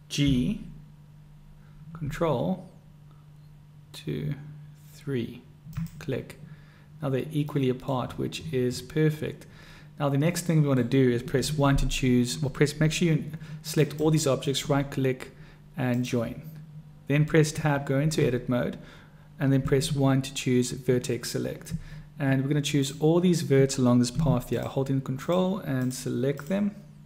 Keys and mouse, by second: 0.4 g, 7.7 drag, 7.7-8.1 middle drag, 7.7 right drag, 10.6 middle click, 11.4 1, 14.0 drag, 15.5 click, 17.6 Tab, 19.9 1, 22.9 click, 24.6 shift+click, 25.2 shift+click, 26.4 shift+click.